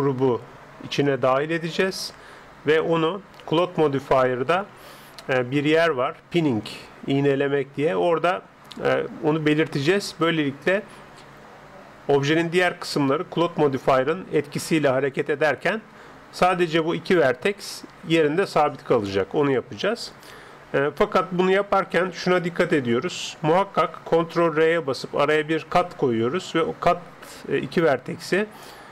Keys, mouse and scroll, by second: 24.6 ctrl+r.